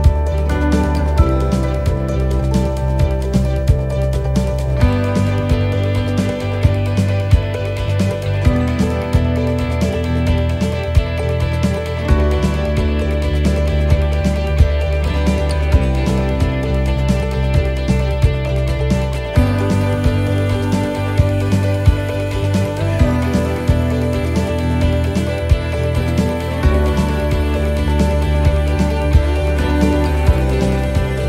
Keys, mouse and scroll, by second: 0.5 click, 1.5 shift+middle click, 2.0 middle click, 2.9 shift+middle click, 3.4 middle click, 6.1 s, 10.6 right click, 12.6 shift+right click, 14.5 click, 15.3 s, 24.0 click, 25.6 middle click, 26.3 click, 29.5 middle click, 30.5-31.1 scroll down 2, 30.9 middle click.